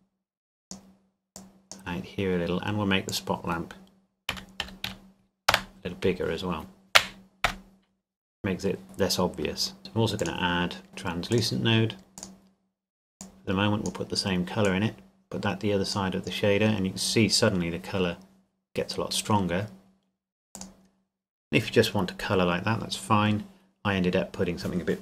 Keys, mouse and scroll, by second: 4.3 KP_Decimal, 4.6 KP_2, 4.9 KP_5, 5.5 KP_Enter, 7.5 KP_0, 8.4-8.8 scroll up 1, 8.8 click, 11.3 click, 18.1 scroll up 1, 20.5 click.